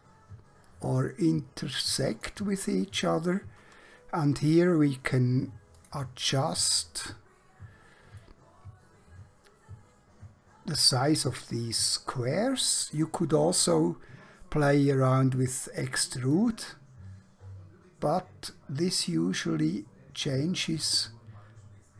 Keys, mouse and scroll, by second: 5.8 click, 8.3 middle click, 16.4 click.